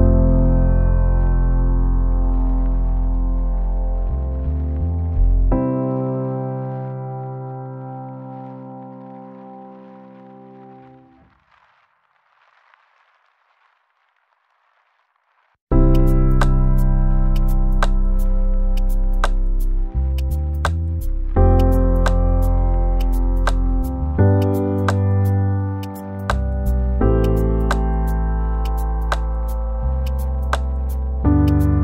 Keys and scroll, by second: 2.8 Return.